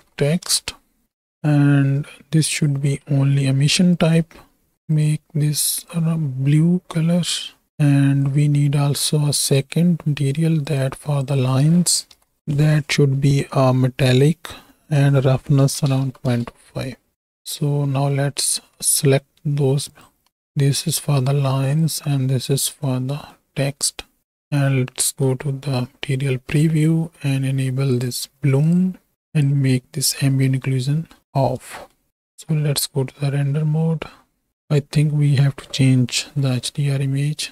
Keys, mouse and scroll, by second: 2.9 middle click, 3.9 click, 4.9 click, 8.4-10.4 drag, 10.6-11.1 drag, 11.2-12.4 drag, 13.7 click, 14.8-16.4 drag, 17.4 click, 17.9 middle click, 20.0 click, 21.8 click, 23.1 click, 24.4 z, 26.3 z, 27.9 click, 28.6 click, 29.3 click, 31.7 shift+click, 32.1 ctrl+space, 32.3 z, 34.5 middle click, 36.3 n.